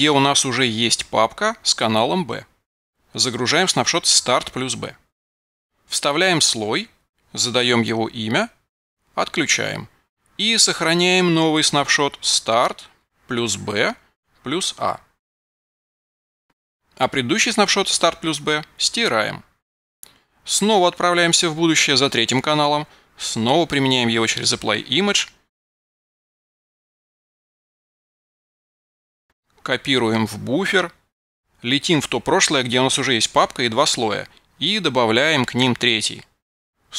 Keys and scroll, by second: 5.9 super+v, 8.6 a, 9.3 Return, 13.3 super+v, 14.1 a, 29.4 super+a, 30.1 super+c, 34.8 super+v, 36.5-36.9 typing.